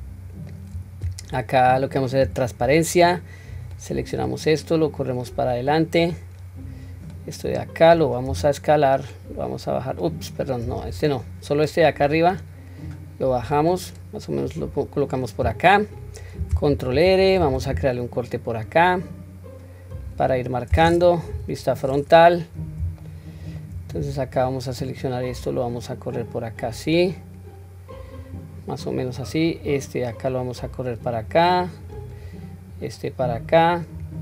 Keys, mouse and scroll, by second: 2.2 q, 3.6 click, 4.9-6.2 drag, 6.9 click, 8.3 s, 10.7 ctrl+z, 11.2 click, 12.9-14.5 drag, 21.3 KP_1, 22.3-22.8 scroll down 1, 23.0 shift+middle click, 24.4 click, 25.8-28.2 drag, 29.3 click, 30.3 click, 31.9 click, 32.7-34.1 drag.